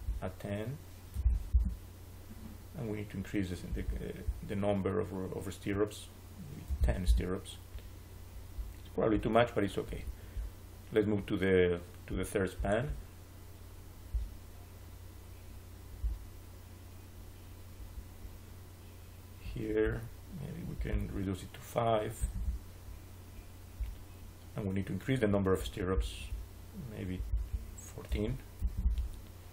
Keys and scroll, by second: 1.0 1, 1.4 Return, 6.3-7.2 typing, 22.1 5, 22.2 Return, 28.0 1, 28.5 4, 28.7 Return.